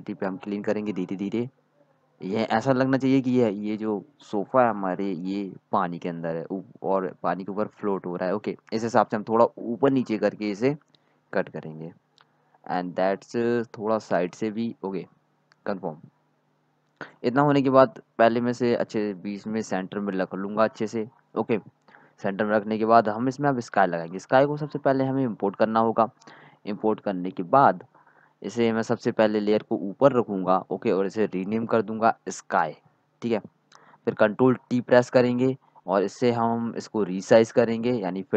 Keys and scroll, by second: 5.2 typing, 11.2-13.0 typing, 16.2-17.4 typing, 21.9-22.3 typing, 23.4-25.0 typing, 33.1-34.4 typing, 35.5-37.2 typing.